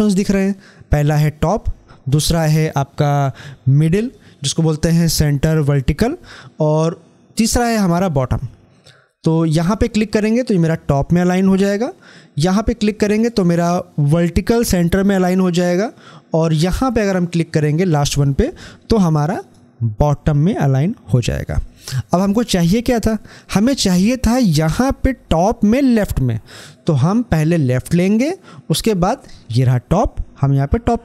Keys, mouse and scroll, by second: 10.4 click, 13.1 click, 19.2 click, 27.6 click, 30.5 click.